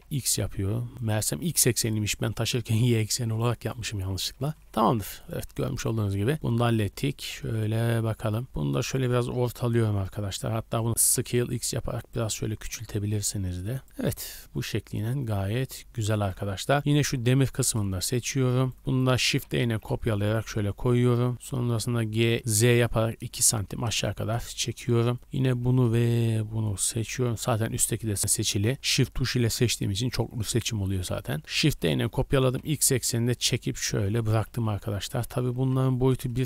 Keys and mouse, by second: 2.2-3.5 middle drag, 3.7 middle click, 4.2 Tab, 4.6 a, 4.8 a, 5.9-8.9 middle drag, 7.3 KP_1, 8.0 z, 8.9-10.4 drag, 10.9 s, 10.9 x, 11.0 s, 12.1-14.3 drag, 12.2 g, 14.2 z, 15.8 middle click, 17.6 middle click, 17.6 KP_0, 17.8 middle click, 18.7 shift+middle click, 18.9 shift+middle click, 19.3 shift+d, 21.2-24.8 shift+drag, 21.8 g, 25.0-25.5 shift+drag, 27.4 middle click, 29.2 shift+middle click, 30.1-34.5 drag, 31.7 shift+d, 34.4-36.4 typing.